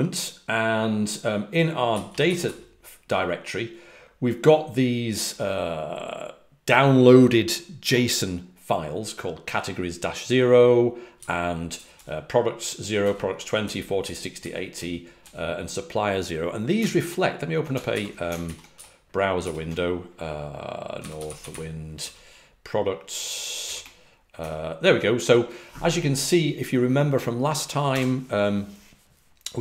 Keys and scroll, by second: 1.8-2.4 typing, 11.1-11.9 typing, 12.9-13.9 typing, 17.8 super+n, 18.4 ctrl+alt+super+Left, 18.7 alt+super+Right, 19.3 alt+super+Right, 20.9-21.9 typing, 21.9 Page_Down.